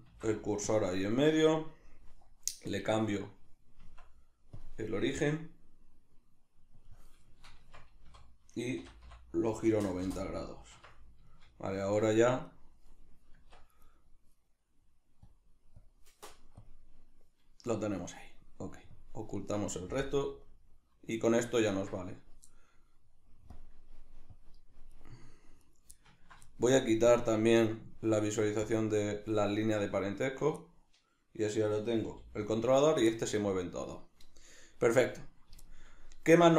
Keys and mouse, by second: 0.1 shift+s, 4.6-7.3 drag, 7.3-12.5 shift+middle drag, 7.6 Tab, 12.5 right click, 13.3 Tab, 13.8 right click, 15.2 click, 15.8 click, 18.9 drag, 19.6-23.5 middle drag, 20.1 KP_Decimal, 23.5 drag, 24.3 click, 24.9 right click, 25.7 right click, 26.0-27.1 ctrl+middle drag, 27.1-30.3 drag, 30.3 right click, 30.6-32.9 middle drag, 32.1 g, 32.9 right click, 33.1-35.1 middle drag, 35.1 click, 35.7-36.5 shift+middle drag.